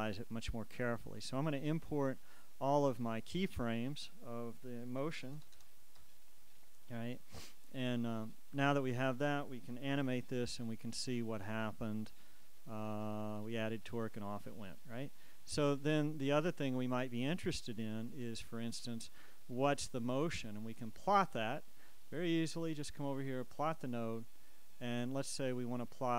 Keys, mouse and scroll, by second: 1.6 click, 3.5 shift+click, 5.1 KP_1, 5.5 KP_0, 6.1 KP_Enter, 7.4 click, 10.0 alt+a, 16.0 Escape, 17.9 right click, 21.0-24.5 drag.